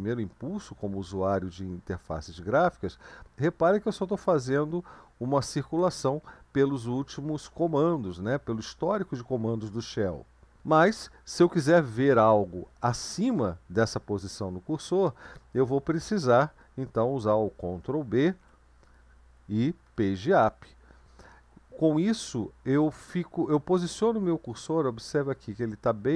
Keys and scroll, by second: 18.2 ctrl+b, 19.8 Page_Up, 24.3 Down, 25.2 Down, 25.9 Down, 26.1 Down.